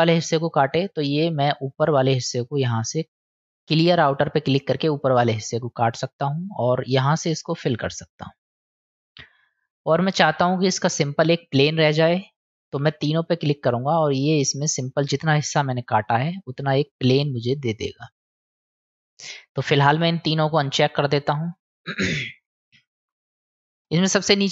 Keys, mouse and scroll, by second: 0.1-0.5 middle drag, 1.6 click, 2.9 middle click, 4.9-6.0 middle drag, 7.4 click, 8.0-9.3 middle drag, 9.3-10.3 drag, 13.0 click, 13.9-18.8 drag, 18.9 middle click, 20.2 click, 20.7 click, 21.3 click, 22.5-23.8 middle drag.